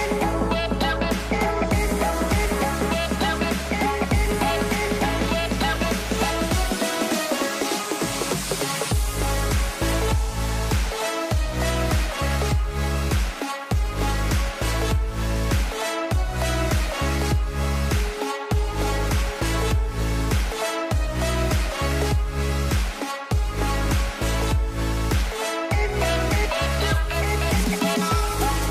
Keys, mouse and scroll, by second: 1.5 shift+middle click, 2.0-3.0 scroll up 3, 2.2 shift+middle click, 3.0 shift+middle click, 3.3 click, 3.5 scroll down 2, 3.7-4.1 scroll up 2, 4.1-5.3 drag, 5.3 middle click, 5.6-6.6 scroll up 3, 5.8 shift+middle click, 6.6-7.4 scroll down 1, 7.4-8.9 drag, 10.1-11.6 drag, 13.6-14.3 middle drag, 14.3 scroll down 1, 14.4-14.7 middle drag, 14.7 a, 14.8 a, 15.0-15.5 middle drag, 15.5 scroll down 2, 15.6 middle click, 16.0 click, 16.5 click, 17.3 scroll up 2, 17.5 Tab, 18.0 ctrl+r, 18.7 ctrl+r, 19.7 ctrl+r, 21.1 middle click, 22.0 click, 22.5 KP_Decimal, 22.9 scroll down 1, 22.9 middle click, 23.2 ctrl+r, 24.0 ctrl+r, 24.6 ctrl+r, 26.0-26.4 scroll down 1, 26.4 ctrl+r.